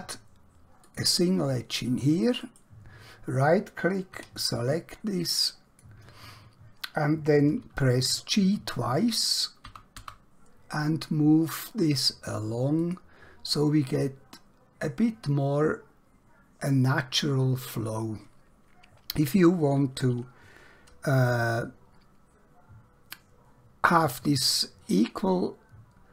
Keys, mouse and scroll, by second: 0.9 click, 2.4 right click, 4.2 1, 5.4 click, 9.8 g, 10.0 g, 12.9 click, 21.2 ctrl+Num_Lock.